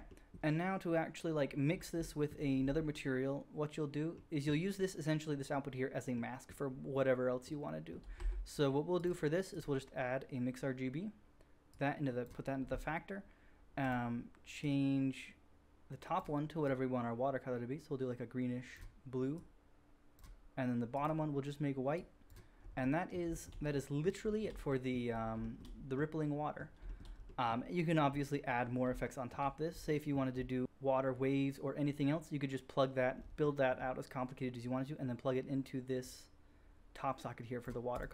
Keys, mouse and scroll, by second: 8.1 q, 9.4 middle click, 9.5 click, 9.5 right click, 9.5-11.8 drag, 11.7-13.9 middle drag, 11.7 right click, 13.9-20.9 drag, 20.9 middle drag, 21.0-36.0 drag, 36.0-37.9 middle drag, 37.9-38.1 drag.